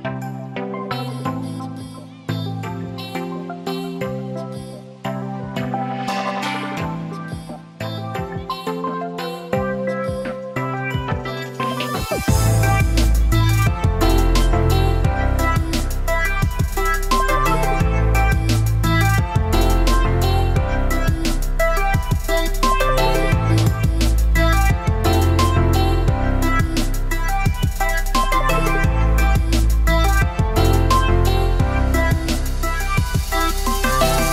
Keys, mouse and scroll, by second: 0.4 click, 0.7 a, 1.9 x, 3.2 shift+a, 8.3 s, 12.6 s, 14.5 s, 16.3 click, 17.2 Tab, 18.6 2, 18.8 click, 19.7 shift+click, 20.8-21.9 drag, 22.8 shift+click, 24.3 click, 26.1 ctrl+b, 32.2 click, 32.5 click.